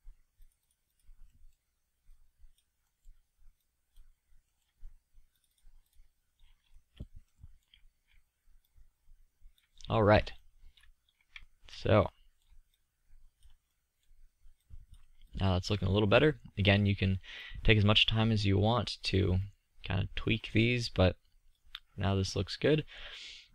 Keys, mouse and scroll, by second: 6.6 middle click, 7.0 middle drag, 13.5-13.9 drag, 15.0 click, 15.2-16.6 middle drag, 17.8-21.1 middle drag, 21.3-23.1 drag.